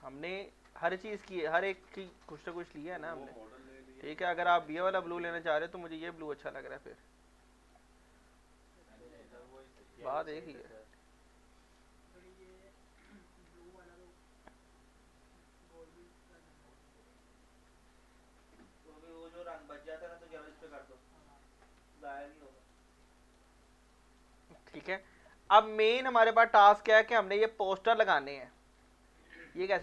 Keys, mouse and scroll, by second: 0.3 right click, 0.6 right click, 1.1 scroll up 1, 1.4 scroll down 1, 4.6-9.6 drag, 9.6 right click, 11.1 right click, 12.3 ctrl+z, 12.8 click, 13.1 ctrl+z, 14.4-19.9 drag, 20.2 alt+right click, 20.6 alt+click, 22.0 f, 22.2 alt+click, 22.2 alt+click, 22.5 alt+right click, 22.9 alt+click, 23.2 alt+right click, 23.5 alt+click, 23.9 alt+right click, 24.3 alt+click, 24.7 alt+middle click, 25.0 alt+click, 26.3 right drag, 26.6 scroll up 2, 28.1 scroll down 1, 28.8 scroll up 1.